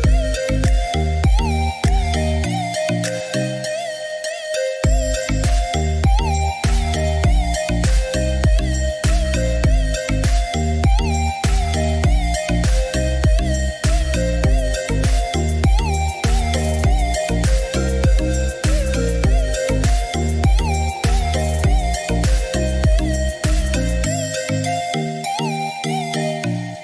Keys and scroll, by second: 16.4 Escape.